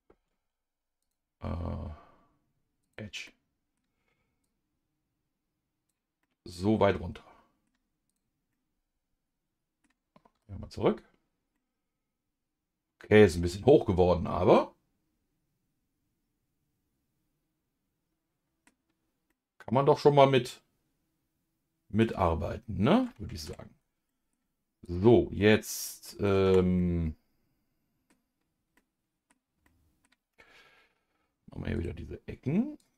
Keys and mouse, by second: 1.0-3.1 drag, 3.2 middle click, 4.4-5.9 drag, 6.2-7.7 middle drag, 8.1 click, 8.5-9.8 middle drag, 10.3 KP_Divide, 11.5-18.7 middle drag, 19.3-22.0 middle drag, 23.4 Tab, 24.1 middle click, 24.8 click, 25.4 middle click, 26.8-28.1 middle drag, 28.7 middle click, 29.6 middle click, 31.7 click, 32.8-32.9 drag.